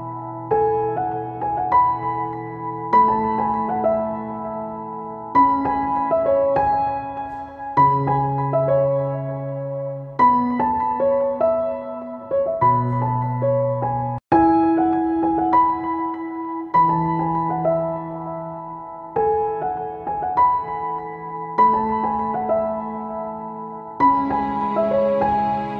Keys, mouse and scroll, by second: 2.6 ctrl+z, 3.0-19.7 shift+drag, 21.8 right click, 22.3-25.7 drag.